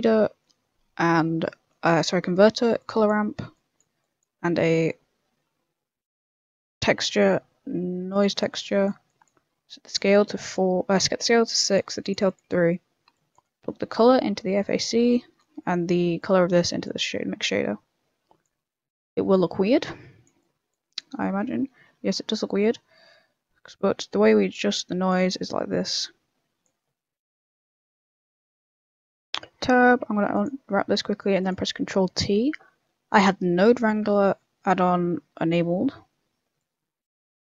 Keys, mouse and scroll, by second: 3.2 middle click, 3.5 click, 4.0 click, 4.4 shift+a, 8.6 click, 9.0 click, 10.9 click, 12.0 click, 12.6 middle click, 13.1 click, 13.9 click, 14.5 middle click, 16.2 click, 20.4 click, 20.8 middle click, 21.4 scroll up 2, 21.5 shift+middle click, 22.3 middle click, 23.7 click, 25.5 click, 26.8 middle click, 27.7 shift+middle click, 28.0 middle click, 29.2 shift+middle click, 29.5 Tab, 30.0 u, 30.8 Tab, 31.4 click, 31.9 ctrl+t, 34.3 middle click, 34.8 middle click, 35.9 middle click, 36.6 click.